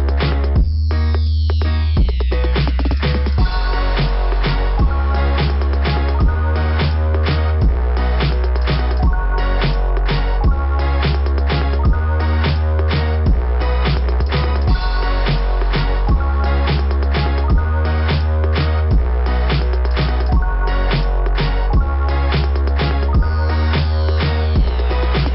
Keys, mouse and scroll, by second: 0.6 click, 1.0 click, 1.2 click, 2.9 click, 3.0 click, 4.1 click, 5.4 click, 6.3 click, 6.5 click, 6.6 click, 8.3 click, 8.5 click, 8.7 click, 8.8 click, 9.0 click, 9.1 click, 9.2 click, 10.5 scroll up 1, 13.3 scroll down 2, 16.8 click, 16.9 click, 17.1 click, 18.1 click, 18.7 click, 19.0 click, 19.1 click, 20.1 click, 20.5 click, 20.6 click, 22.1 click, 22.2 click, 23.4 click, 23.7 click, 23.8 click.